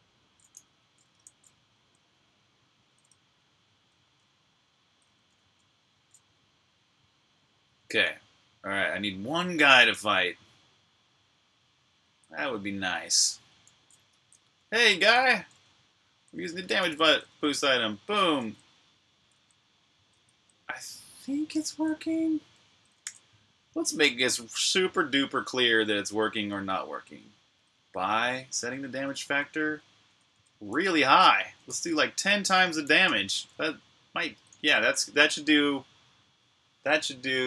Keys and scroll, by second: 0.0-1.1 typing, 2.7-3.5 typing, 5.6-6.4 typing, 7.9-11.8 typing, 13.3-17.2 typing, 19.0-20.3 typing, 21.6 super+q, 22.8 super+j, 27.5-32.9 typing, 34.3-35.7 typing.